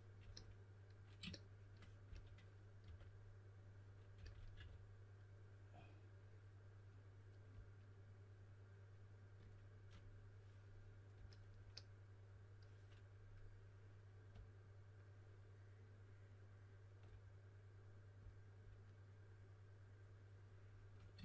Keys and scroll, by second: 2.0-4.5 typing.